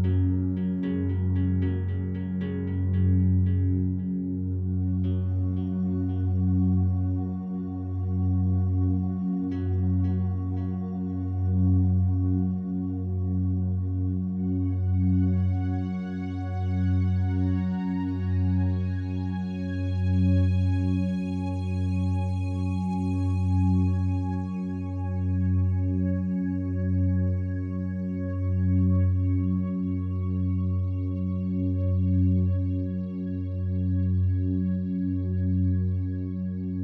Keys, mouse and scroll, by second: 2.8 click, 3.2 a, 3.4 a, 4.3-14.1 alt+drag, 14.6 shift+right click, 15.4 3, 15.8 right click, 16.4 shift+right click, 18.4 x, 19.2 click, 20.3 2, 21.7 alt+shift+right click, 22.5 f, 23.5 a, 25.0 right click, 26.3 3, 26.6 right click, 30.5-36.8 drag.